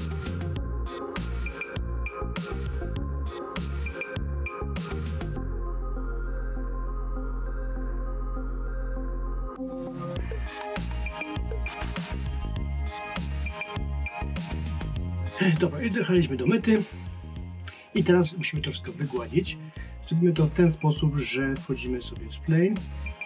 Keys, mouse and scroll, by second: 0.4 click, 0.9 click, 1.7 click, 2.4 click, 2.8 click, 3.6 click, 4.9 click, 5.6 click, 9.0 click, 9.4 click, 11.0 click, 11.4 click, 11.7 click, 12.1 click, 13.0 click, 22.7 click.